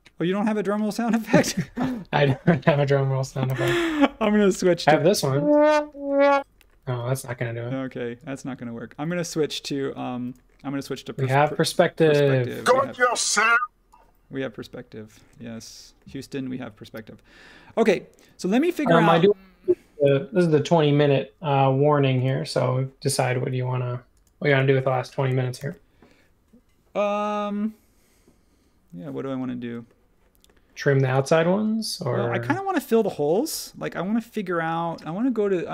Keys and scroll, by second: 3.0-4.2 typing, 6.8 s, 10.8 space, 11.6 s, 15.2 space, 18.2 space, 25.6 super+s.